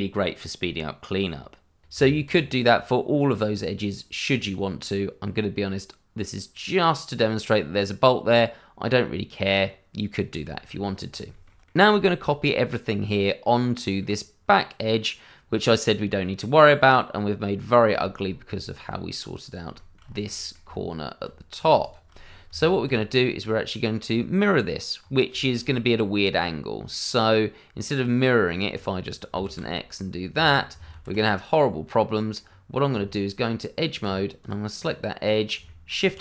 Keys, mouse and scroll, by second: 1.9 Tab, 2.7-3.3 scroll down 1, 3.3-4.3 scroll up 1, 4.3 scroll down 1, 4.9 middle click, 10.4 shift+middle click, 10.5 middle click, 10.9-11.3 scroll down 1, 11.3 shift+middle click, 11.8 middle click, 18.0 shift+middle click, 18.2 scroll up 1, 18.5 middle click, 19.4 click, 19.8 middle click, 20.0-20.3 scroll up 1, 20.3 middle click, 20.6 Tab, 21.6 click, 21.9 click, 22.2 scroll down 1, 22.4 Tab, 23.0 scroll down 1, 23.4 middle click, 25.0-25.3 scroll up 1, 25.3 shift+middle click, 25.6 middle click, 29.4 alt+x, 30.3 click, 30.9 ctrl+z, 31.5 scroll down 1, 31.8 middle click, 32.4-32.9 scroll up 1, 32.9 Tab, 34.4 click, 34.8 middle click, 35.8 shift+middle click, 36.1 shift+s.